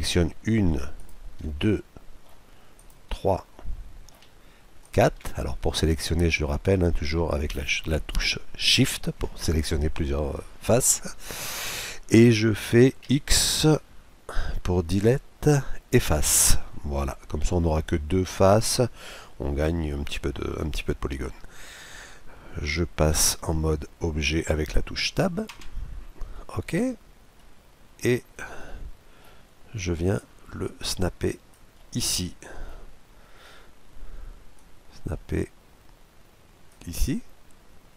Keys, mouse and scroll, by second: 1.5-4.9 middle drag, 4.9-6.6 right drag, 5.6-7.2 middle drag, 13.0 x, 16.6-18.3 middle drag, 25.5 Tab, 26.3-30.2 middle drag, 30.1-31.9 drag, 31.8-33.5 middle drag, 33.5-34.5 scroll down 1, 34.5-36.2 drag, 34.5-34.9 scroll down 1.